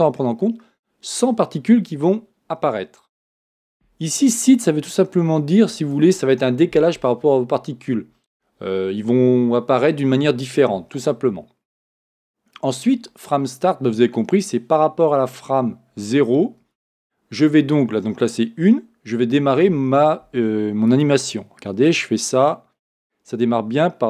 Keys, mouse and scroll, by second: 20.9-23.7 drag.